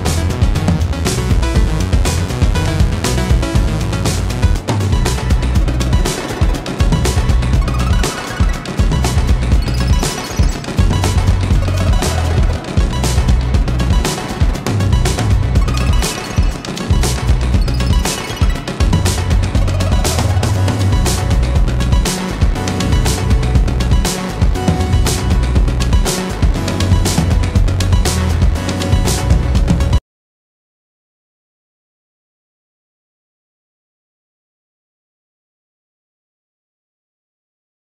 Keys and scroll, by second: 10.6 ctrl+space, 17.5 ctrl+space.